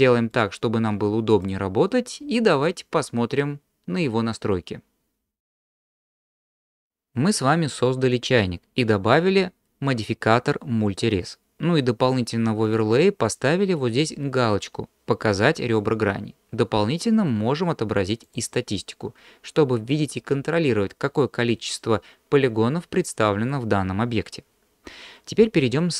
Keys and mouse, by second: 0.3-1.4 drag, 12.8-19.1 drag.